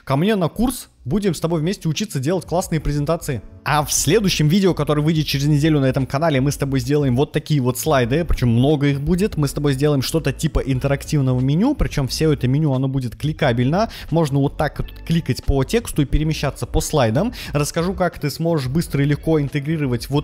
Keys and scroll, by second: 7.0 Right.